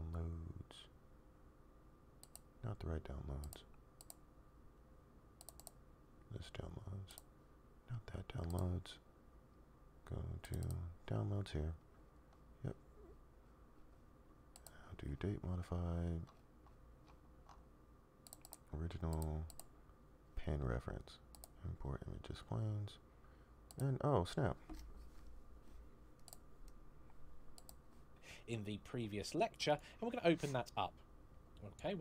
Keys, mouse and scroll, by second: 29.3 click.